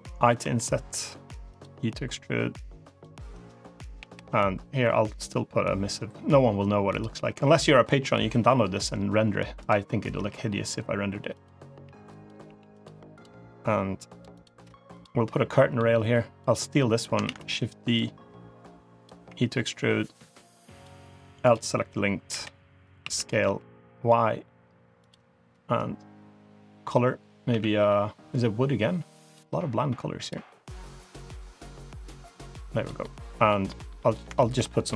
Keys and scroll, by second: 0.3 i, 1.6 e, 3.8 g, 8.6 g, 10.0 g, 12.3 g, 17.1 shift+d, 19.1 e, 22.2 l, 22.9 s, 27.4 a, 27.6 g, 34.8 3.